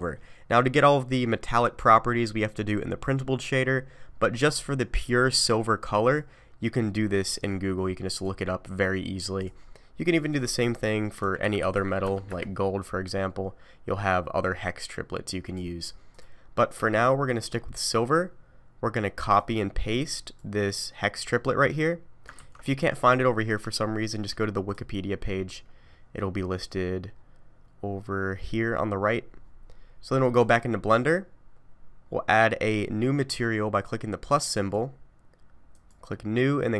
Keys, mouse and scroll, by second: 34.5 click, 35.7 click, 36.6 click.